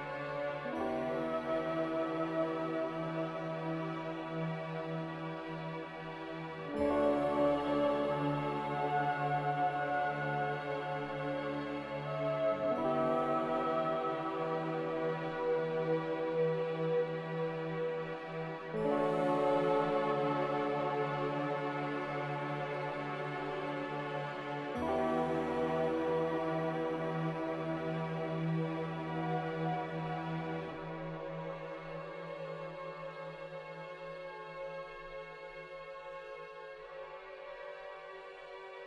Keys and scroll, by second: 8.9-9.6 typing, 16.1 s, 19.9 a, 28.2 ctrl+c, 28.3 ctrl+v, 31.6 ctrl+g.